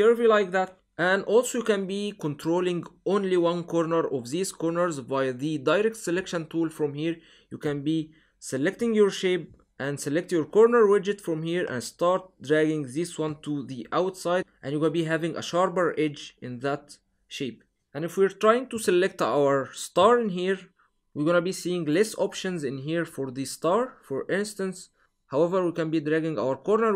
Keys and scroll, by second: 18.5 v.